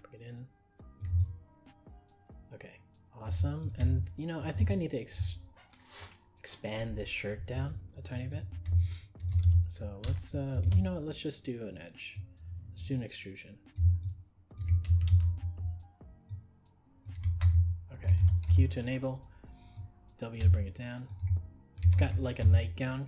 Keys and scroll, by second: 10.6 ctrl+e, 15.1 ctrl+z.